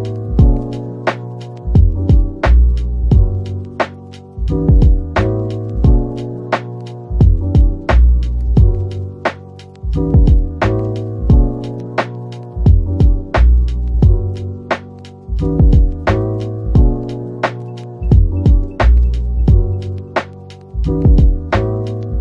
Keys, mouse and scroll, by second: 1.5-1.9 scroll down 1, 1.8-5.9 typing, 7.5 typing, 10.3-12.3 typing, 10.8 Tab, 11.4 Tab, 12.5 Return, 15.4-16.3 typing, 17.3-17.7 typing, 19.4-20.3 typing, 21.9 scroll up 1.